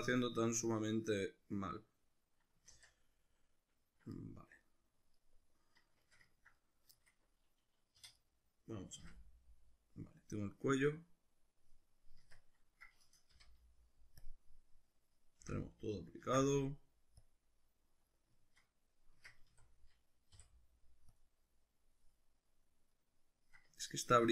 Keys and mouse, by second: 2.7 ctrl+z, 8.0 3, 8.2 right click, 9.0 l, 12.2 Tab, 13.3 n, 14.2 click, 15.5 n, 16.3 ctrl+a, 18.4-24.3 shift+middle drag, 19.1 Tab, 19.5 a, 20.4 u.